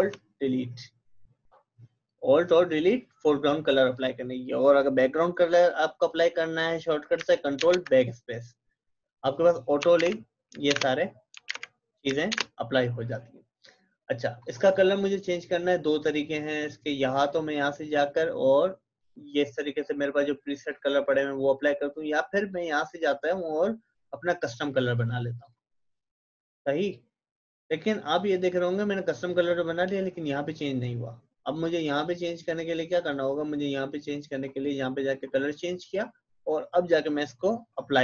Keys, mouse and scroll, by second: 7.2 alt+Delete, 7.6 ctrl+BackSpace, 9.9 alt+Delete, 10.7 ctrl+BackSpace, 11.5 alt+Delete, 12.3 ctrl+BackSpace, 14.4 click, 17.1 click, 17.4 click, 31.5 click.